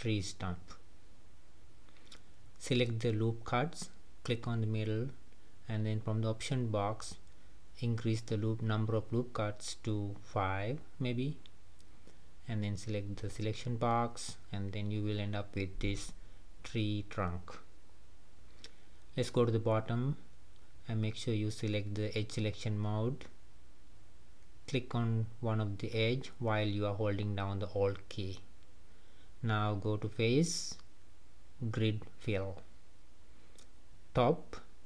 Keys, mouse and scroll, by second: 2.9-7.2 drag, 8.1-10.9 drag, 12.4 click, 13.6 middle click, 14.3 scroll up 2, 14.6-15.8 middle drag, 15.8-16.1 scroll down 2, 16.1-21.8 middle drag, 21.8 click, 23.0 middle click, 23.5-24.0 scroll up 1, 24.0-27.1 middle drag, 27.2 alt+click, 28.1-30.0 middle drag, 30.0-32.2 drag, 32.2 middle click, 33.1 scroll down 3, 33.6-34.8 middle drag.